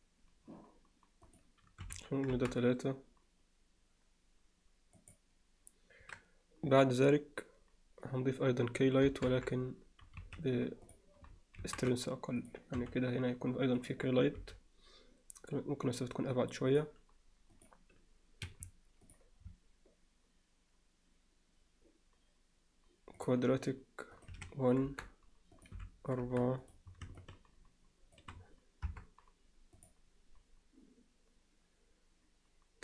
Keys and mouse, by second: 1.3 click, 9.1 KP_0, 9.3 KP_7, 10.2 z, 10.9 click, 11.6 shift+d, 12.8 r, 14.4 g, 17.5 click, 19.1-23.3 drag, 24.2-25.2 drag, 25.6 click, 26.7 click, 28.9 KP_0.